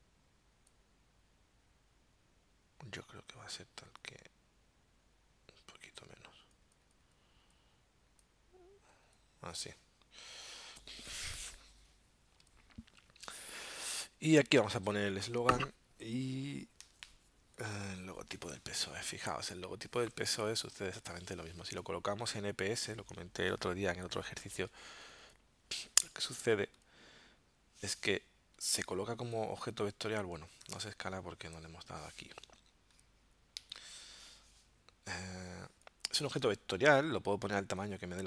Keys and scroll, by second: 21.4 super+d, 30.6 super+z, 32.4 alt+super+0, 33.7 alt+super+-.